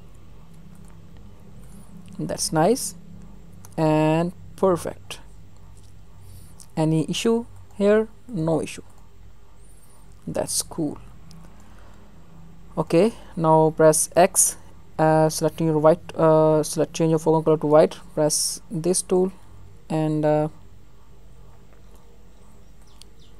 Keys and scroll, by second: 19.5 alt+z, 20.4 ctrl+alt+z.